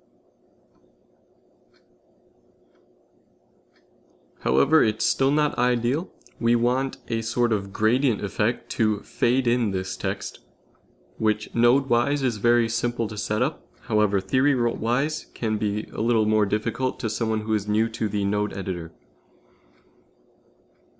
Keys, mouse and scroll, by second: 0.7 middle click, 2.5 shift+z, 3.2 g, 15.1 z, 15.2 z, 16.3 shift+z, 17.1 z, 17.3 z, 20.7 click, 20.9 click.